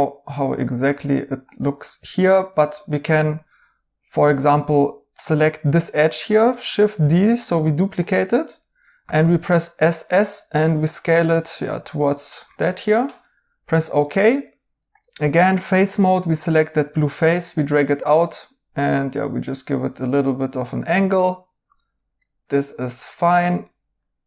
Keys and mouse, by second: 2.6 2, 5.1 right click, 6.9 d, 9.0 typing, 12.5 right click, 14.0 right click, 14.9-15.6 typing, 22.2 right click.